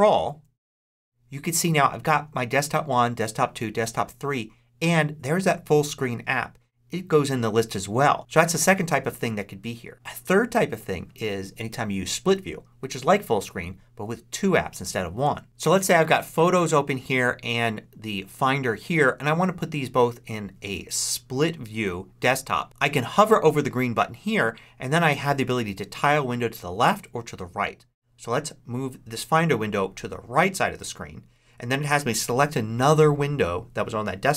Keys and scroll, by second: 0.2 ctrl+Up.